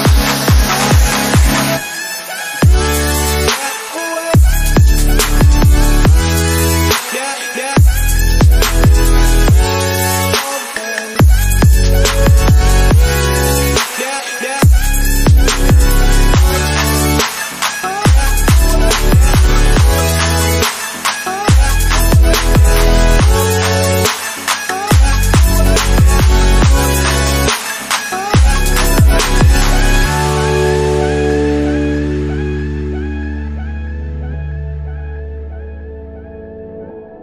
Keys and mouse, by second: 0.5-4.0 typing, 4.6-6.1 drag, 6.1 g, 13.1-23.3 drag, 23.8 x, 27.9 shift+right click, 30.3 g.